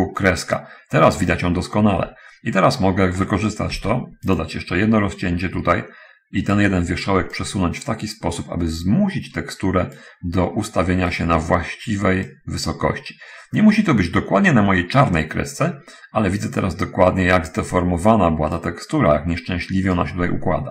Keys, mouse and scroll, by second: 3.9 ctrl+r, 4.7 ctrl+click, 5.9 Escape, 6.5 right click, 7.7-10.5 drag, 11.1 right click, 12.6-18.9 drag.